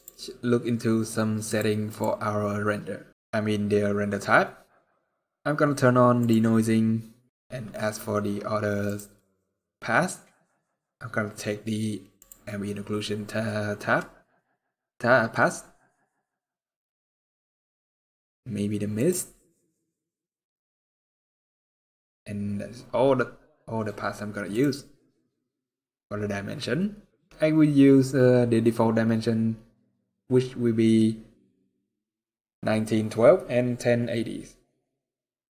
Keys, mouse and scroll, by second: 0.5 click, 0.5 scroll down 8, 1.2 click, 1.6 click, 3.1-3.9 scroll up 10, 3.9-4.4 scroll down 15, 4.4 scroll up 1, 4.9-5.7 scroll down 1, 5.9 click, 5.9-6.6 scroll down 5, 7.4-8.6 scroll up 9, 8.6 click, 8.6 scroll up 3, 9.9-11.1 scroll down 5, 11.9 click, 11.9-13.0 scroll down 2, 18.7 click, 24.2 click, 35.2-35.4 scroll down 1.